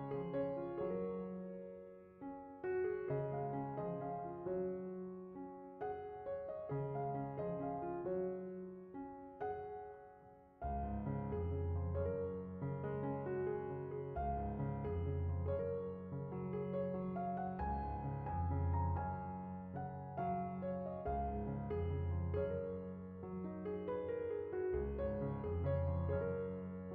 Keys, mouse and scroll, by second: 1.7-8.0 drag, 11.2-12.1 scroll down 5, 12.1-14.5 drag, 15.8-17.0 scroll down 10, 17.0-18.6 scroll down 8, 18.6-19.1 scroll down 14, 19.6-20.2 drag, 22.3-23.9 drag, 25.7 click.